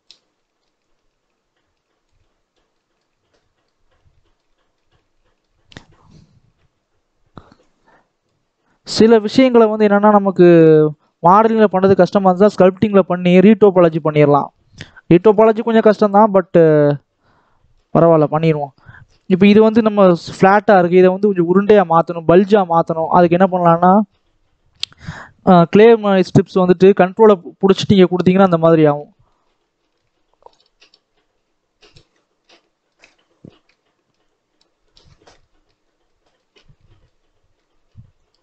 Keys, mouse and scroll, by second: 0.3 shift+middle click, 0.7-2.1 shift+drag, 2.1-3.8 middle drag, 3.8 scroll up 1, 4.0-7.1 shift+middle drag, 7.1-7.6 shift+scroll up 2, 7.6 click, 8.6 click, 9.1-9.4 scroll up 1, 9.4 middle click, 10.3 ctrl+click, 11.1 ctrl+z, 11.9-13.3 shift+middle drag, 13.3 click, 13.9-15.8 shift+middle drag, 15.8-17.9 drag, 17.9 ctrl+z, 19.2-26.7 drag, 27.8-30.4 middle drag, 30.4-32.0 ctrl+drag, 32.0-34.1 middle drag, 34.1 ctrl+click, 35.0 middle click, 35.7 scroll up 3, 36.0 middle click, 36.5 ctrl+z, 36.7-38.1 shift+middle drag, 38.1-38.4 ctrl+drag.